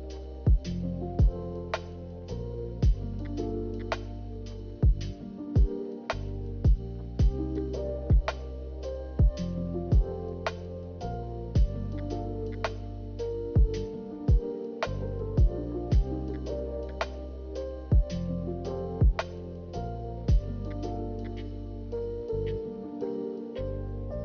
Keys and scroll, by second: 1.4 a, 10.5 b, 11.4 Delete.